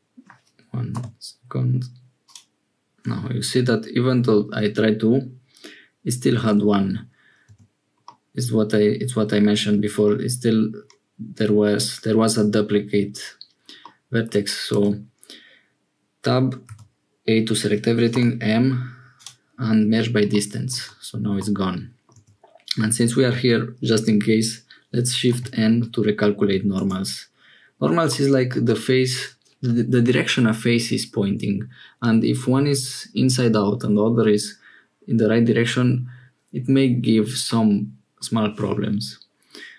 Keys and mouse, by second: 0.9 m, 6.3 ctrl+z, 7.4 Tab, 8.0-9.3 middle drag, 10.1-12.7 drag, 13.8 click, 14.7 Tab, 16.6 a, 18.1 m, 20.3 click, 20.8 Tab, 21.3 middle click, 22.1 Tab, 25.3 shift+n, 26.7 Tab, 28.1 middle click, 37.5 middle click.